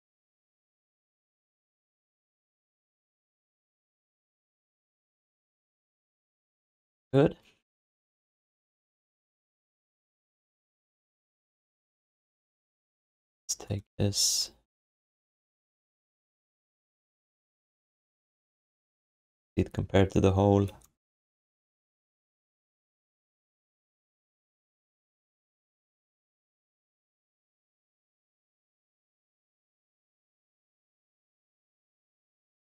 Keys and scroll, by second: 0.9 w, 2.5 r, 4.4 q, 5.0 alt+shift+d, 5.2 ctrl+s, 6.2 w, 9.1 ctrl+s, 10.5 alt+q, 18.9 v.